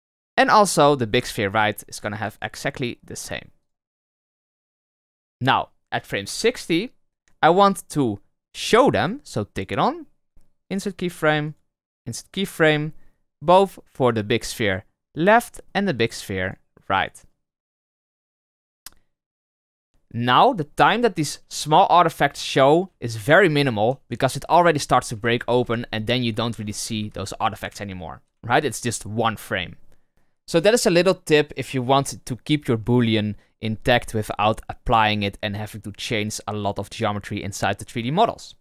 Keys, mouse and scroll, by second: 0.7 click, 2.0-2.3 drag, 2.7-6.3 right drag, 6.3 Right, 8.5 click, 8.9 click, 9.5-14.5 right drag, 14.6 click, 16.0 click, 16.4 click, 16.9-19.9 right drag, 19.9 scroll down 3, 20.2-20.6 middle drag, 20.6-21.5 scroll up 3, 21.5 Right, 22.9 Right, 23.2 Right, 23.4 Right, 23.6 Right, 23.8 Right, 24.0 Right, 24.2 Right, 24.4 Right, 24.6 Right, 24.8-25.3 Right, 25.5 Right, 25.6 Right, 25.7-26.6 scroll down 7, 26.6-28.3 Right, 28.4-29.9 Left.